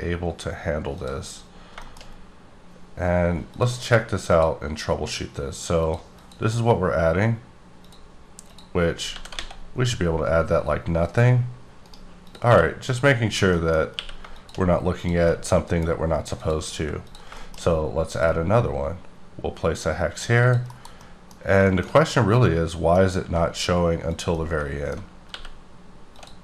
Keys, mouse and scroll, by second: 1.0 click, 1.3-1.7 scroll up 3, 1.8 shift+middle click, 2.1 scroll up 1, 3.4 click, 4.2 click, 5.7 click, 6.2 click, 7.2 scroll up 2, 7.8 click, 8.4 click, 9.0 scroll down 1, 9.1 g, 9.3 x, 11.9 right click, 12.2 click, 12.5 q, 12.8 click, 13.3 scroll down 1, 13.6 middle click, 13.9 q, 14.3 shift+click, 15.3 middle click, 16.4 click, 17.1 click, 17.3 shift+middle click, 18.1 click, 20.3 click, 20.7 KP_Decimal, 21.0 middle click, 22.0 scroll up 1, 22.1 middle click, 23.1 s, 24.1 click, 24.3 middle click, 25.1 scroll down 4, 25.3 g, 26.1 click.